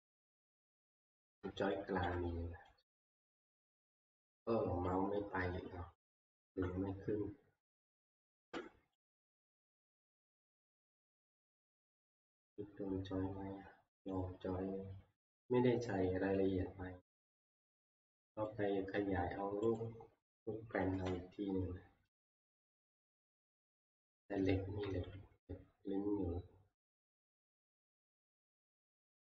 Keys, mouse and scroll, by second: 1.1 scroll, 1.7 shift+middle click, 1.8 shift+scroll, 3.2 shift+scroll, 4.8-5.1 shift+scroll, 6.1-6.9 shift+scroll, 7.7 scroll, 7.8 click, 9.1 click, 9.5 click, 10.1 middle click, 11.8 click, 14.1 click, 18.0 click, 18.5 click, 18.9 scroll, 19.8 click, 20.9 Delete, 21.7 scroll, 22.7-23.3 scroll, 23.3-24.5 scroll, 25.1 t, 28.7 click.